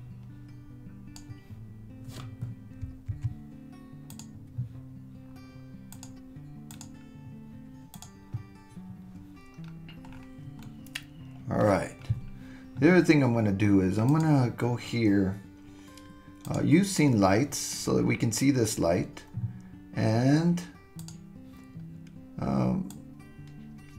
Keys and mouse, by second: 3.1 super+z, 6.1 click, 7.9 click, 10.6-11.8 middle drag, 14.1-17.5 drag, 21.0-23.9 drag.